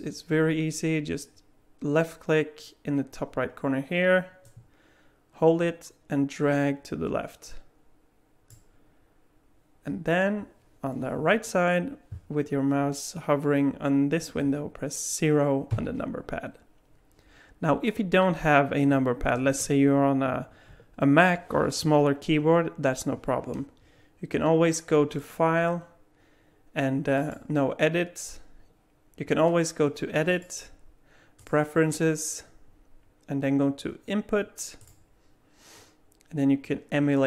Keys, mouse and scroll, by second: 4.4 click, 15.7 KP_0, 25.2 click, 27.2 click.